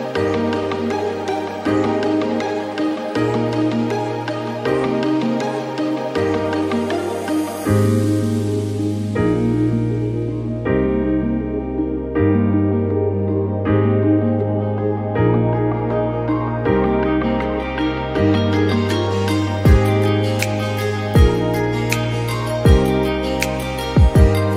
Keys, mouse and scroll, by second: 0.0-1.0 scroll down 1, 1.0-1.7 scroll down 1, 1.7-2.4 scroll down 1, 2.4-3.2 scroll down 1, 3.2-4.6 scroll down 1, 4.6-5.6 scroll down 1, 5.6-11.5 scroll down 1, 11.5-13.1 scroll down 1, 13.1-14.8 scroll down 1, 14.8-15.9 scroll down 1, 15.9-16.5 scroll down 1, 16.5-21.0 scroll down 1, 21.0-24.5 scroll down 1.